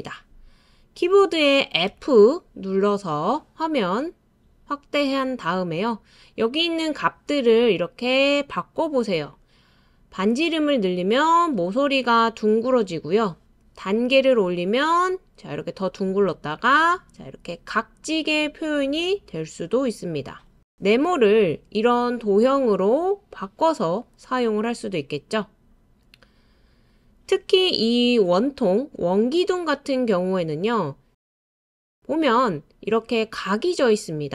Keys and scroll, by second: 1.9 f.